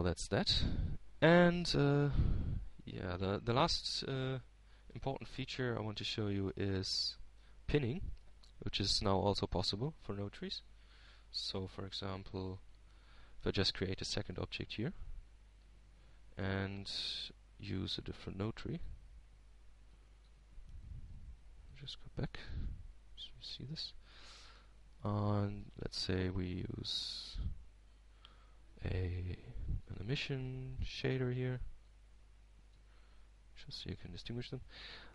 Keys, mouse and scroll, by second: 3.5-4.7 middle drag, 5.4-6.5 drag, 7.4-7.9 scroll down 1, 7.9 middle click, 9.0 shift+Tab, 10.6 click, 17.1 shift+d, 18.2 shift+click, 22.4-23.5 drag, 23.6 click, 24.4 x, 25.1-25.5 scroll down 1, 25.5-27.8 middle drag, 28.1 shift+click, 28.2 shift+x, 28.7 shift+a, 33.5-35.1 drag.